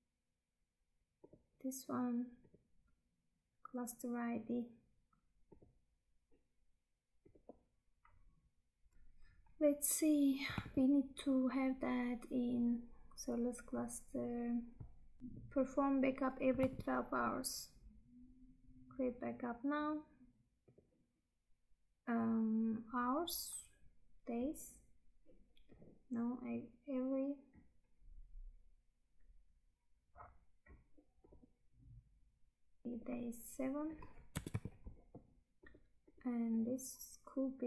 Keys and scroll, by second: 8.9 Tab, 10.7 Tab, 16.7 Tab.